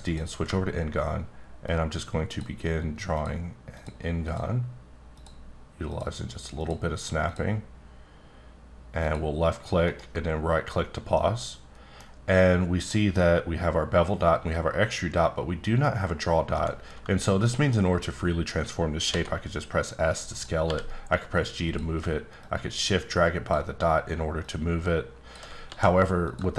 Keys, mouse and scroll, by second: 0.0 click, 3.1 ctrl+click, 3.7 ctrl+click, 4.3 ctrl+click, 5.9 ctrl+click, 7.3 ctrl+click, 9.0 ctrl+click, 9.9 ctrl+right click, 11.1 middle click, 12.9 middle click, 17.0-17.4 scroll down 1, 17.4 middle click, 19.1 s, 20.3 click, 20.6 g, 21.6 click, 24.4 shift+click, 25.7 s, 26.2 click.